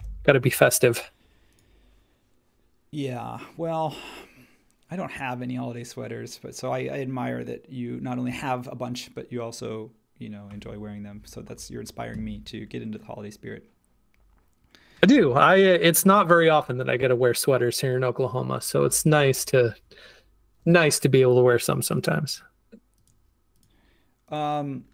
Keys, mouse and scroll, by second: 0.0 super+s, 19.0 super+1.